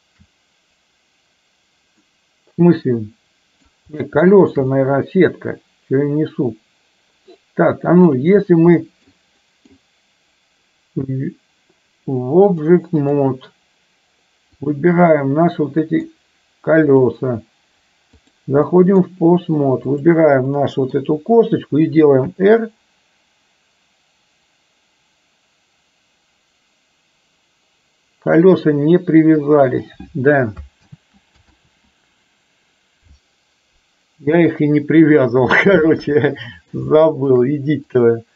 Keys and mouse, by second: 2.2-3.7 middle drag, 4.4 shift+click, 4.8-8.2 middle drag, 8.9 middle click, 9.4 middle drag, 12.7-13.2 drag, 15.2-16.2 middle drag, 17.0-18.5 drag, 18.8 middle drag, 19.9 click, 20.7 middle click, 22.3 r, 29.0 r, 30.9 ctrl+z, 31.5 ctrl+z, 34.4 KP_3, 35.7-36.0 shift+middle drag, 36.3-37.3 middle drag, 37.9 click.